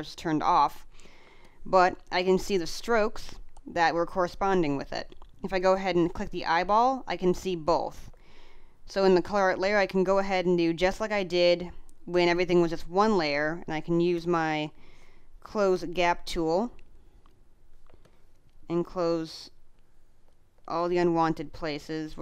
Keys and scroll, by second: 1.5 space, 7.6 space, 9.5 space, 18.0 space, 21.1 space.